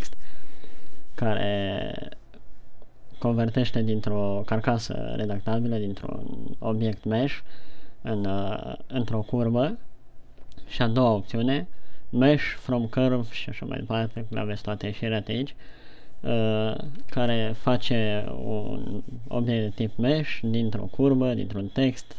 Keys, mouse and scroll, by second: 17.6 alt+c.